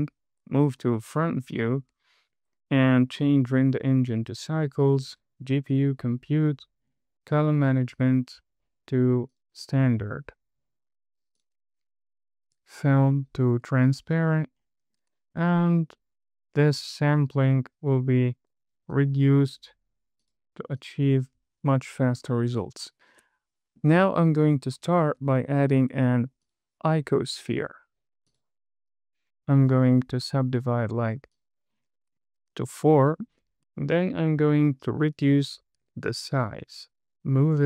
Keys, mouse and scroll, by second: 0.4 KP_1, 0.9 scroll up 2, 1.5 shift+middle click, 2.6 click, 3.5-4.6 drag, 6.0 click, 7.1-7.5 scroll down 5, 8.3 click, 8.6 scroll down 2, 9.6-11.8 drag, 13.2-13.5 drag, 14.2 click, 14.6-15.7 scroll up 4, 16.3 click, 17.1-19.3 drag, 19.9 click, 20.5 click, 21.1 click, 23.6 shift+middle click, 25.9 shift+a, 30.0 click, 31.4 click, 31.7 click, 32.5-32.9 scroll up 3, 33.0 shift+middle drag, 33.7 click, 36.2 s, 37.1 z.